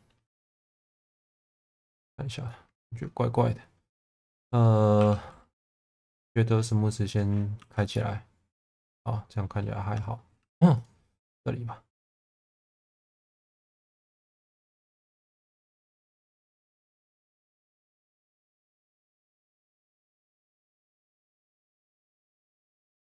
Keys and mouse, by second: 1.5 middle click, 2.4 alt+middle click, 5.0 3, 5.5 a, 7.6 Tab, 7.9-9.6 middle drag, 9.9 Tab, 10.4 2, 11.2 middle click, 14.2 1, 15.1 shift+v, 16.9-18.4 middle drag, 18.6 Tab, 19.0-20.0 middle drag, 20.1 Tab, 21.7 click, 22.0 shift+middle click.